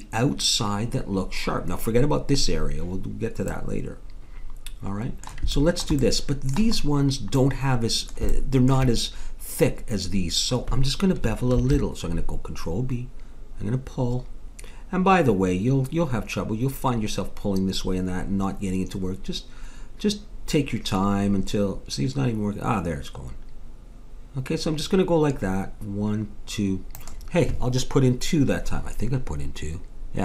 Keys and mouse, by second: 3.5-7.6 middle drag, 7.9-10.1 middle drag, 11.5 ctrl+b.